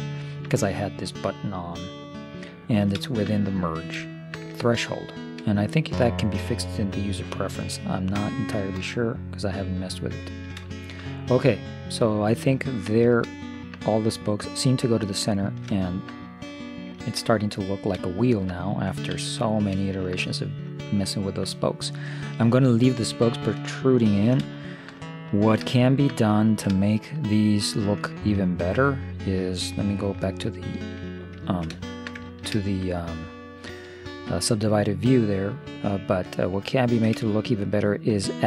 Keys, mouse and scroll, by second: 2.7-7.5 middle drag, 8.2 Tab, 11.5-12.6 middle drag, 13.4-18.8 middle drag, 19.2 ctrl+s, 22.8 middle click, 23.9 middle click, 25.9-27.9 middle drag, 29.8 middle click, 30.9 ctrl+3, 31.5 middle click, 36.8-38.4 middle drag.